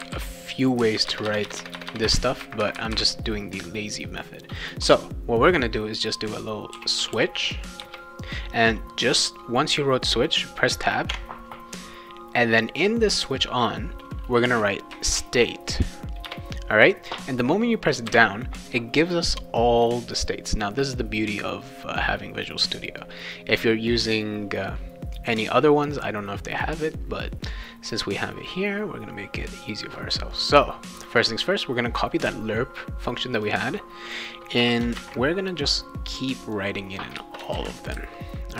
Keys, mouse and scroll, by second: 0.0-0.1 typing, 1.1 Return, 1.3 Return, 1.4 Return, 1.5 Return, 1.7 Return, 2.1 Return, 6.7 s, 7.0 w, 7.8 Return, 11.1 Tab, 15.1 shift+s, 16.2 Return, 30.4 click, 32.3 ctrl+c, 33.4 click, 34.6 Return, 34.9 ctrl+v, 36.4 click, 37.1 Return, 37.5 ctrl+v.